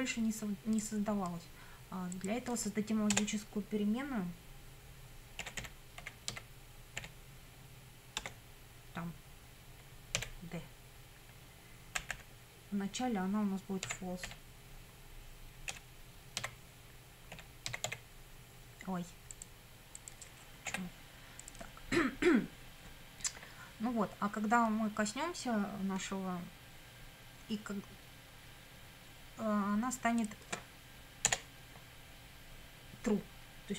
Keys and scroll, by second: 3.1 Return, 5.2-7.0 typing, 8.2 space, 10.2 d, 12.0 =, 13.9 f, 14.3 o, 15.7-18.4 typing, 20.7 BackSpace, 31.3 Return.